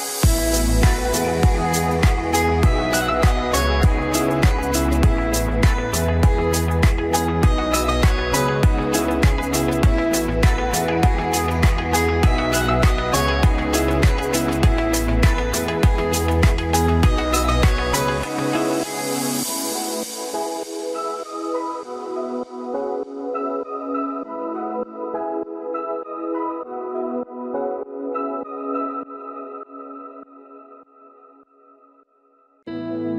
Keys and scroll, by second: 4.3 Delete, 5.3 ctrl+d.